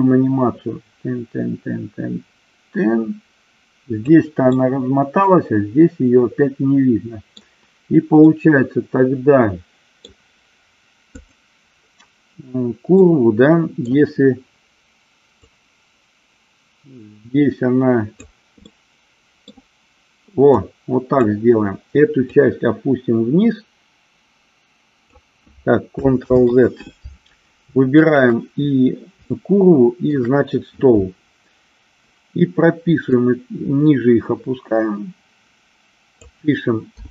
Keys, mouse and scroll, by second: 0.0-4.4 drag, 4.7-7.6 middle drag, 8.5-10.3 middle drag, 11.4 click, 13.3-14.1 middle drag, 15.7-18.5 drag, 19.0 middle click, 20.7 click, 22.6-25.4 drag, 26.5 ctrl+z, 28.3 shift+click, 29.5-30.3 shift+middle drag, 33.5-36.5 drag.